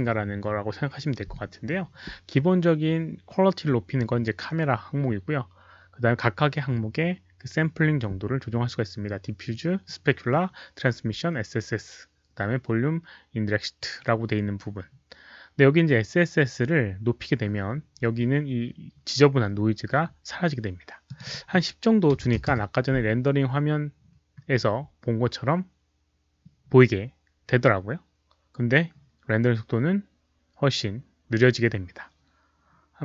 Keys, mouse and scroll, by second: 17.9 scroll up 1, 19.2-19.5 scroll down 1, 21.0 click, 21.2 click, 22.1 click, 22.1 KP_1, 22.3 KP_0, 22.4 Return, 26.8 click, 31.8 click, 32.9 Return, 32.9 KP_0.